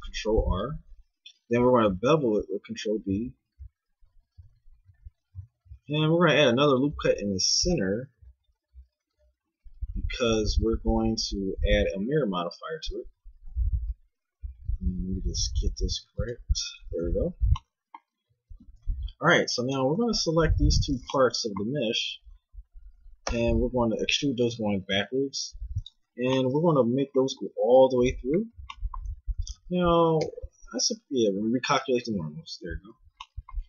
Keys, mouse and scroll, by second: 0.8 ctrl+b, 16.9 a, 17.0 z, 18.7 ctrl+Tab, 23.3 e, 27.3 g, 29.1 a, 29.3 a, 30.2 ctrl+n, 32.1 a.